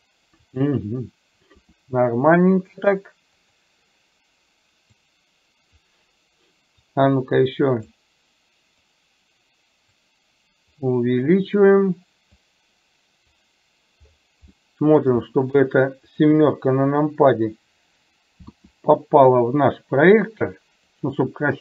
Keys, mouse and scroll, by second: 1.6 r, 5.1 click, 7.0-8.0 drag, 9.1 click, 10.9 click, 12.6 click, 14.7 middle click, 15.4 shift+middle click, 16.4 KP_7, 18.6 r.